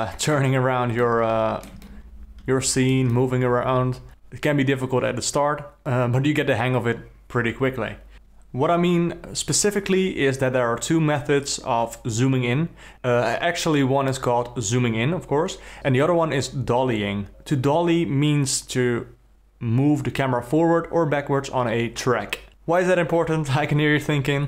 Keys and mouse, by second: 1.0-1.7 ctrl+middle drag, 1.8-2.9 alt+middle drag, 3.1-4.1 middle drag, 4.1 KP_0.